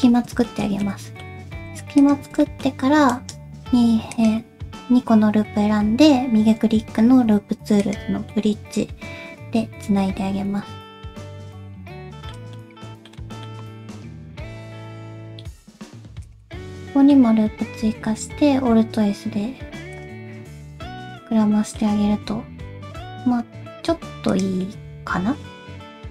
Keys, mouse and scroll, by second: 0.5 shift+middle click, 0.8 middle click, 2.0 alt+shift+click, 2.4 middle click, 3.1 right click, 8.3 middle click, 12.5 middle click, 13.2 middle click, 14.4 ctrl+r, 16.8 middle click, 17.4-17.9 scroll up 2, 17.9 alt+s, 20.1 scroll up 1, 20.2 middle click, 21.2 middle click, 22.1 alt+s, 24.6 middle click.